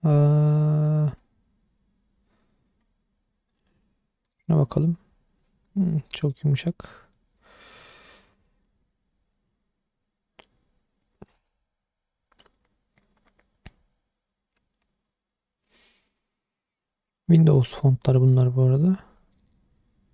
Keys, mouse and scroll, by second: 6.2 click.